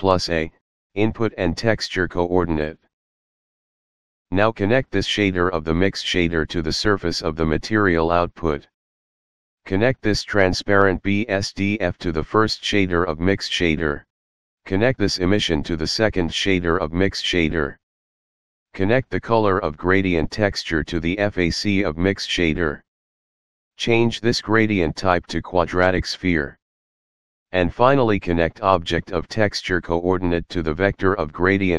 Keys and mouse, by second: 0.3 click, 3.2 click, 6.7 click, 11.6 click, 12.6 click, 15.4 click, 19.8 click, 24.2 click, 26.0 click, 30.2 click.